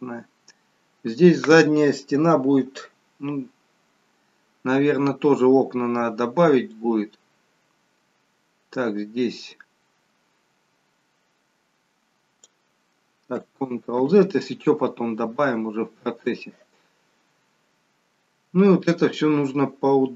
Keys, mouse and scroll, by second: 6.6 click, 13.9 ctrl+z, 16.3 click.